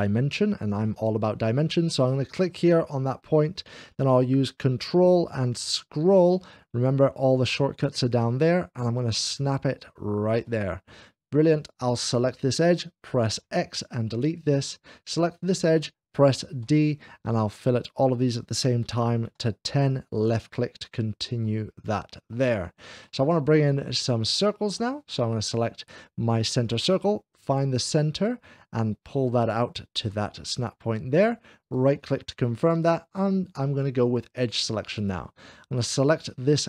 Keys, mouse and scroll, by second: 2.5 click, 5.1-6.2 ctrl+scroll up 1, 10.1 click, 11.5 click, 13.5 x, 14.9 click, 16.6 d, 19.0-20.3 typing, 20.0 click, 20.8-21.6 scroll down 2, 21.3-24.1 middle drag, 24.2-25.3 shift+middle drag, 26.5 click, 28.0 click, 28.9 typing, 30.4 click, 31.5-32.5 right drag, 33.9-36.6 drag.